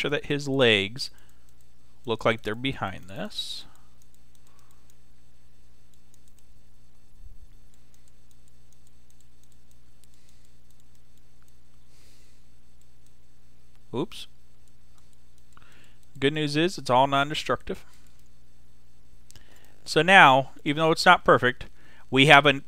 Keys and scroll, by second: 14.0 x, 22.5 x.